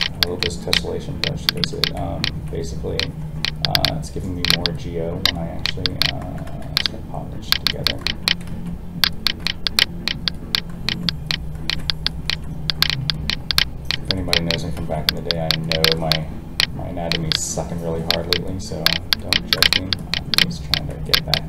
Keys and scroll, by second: 6.6 ctrl+z, 8.5 alt+a, 14.7 alt+a.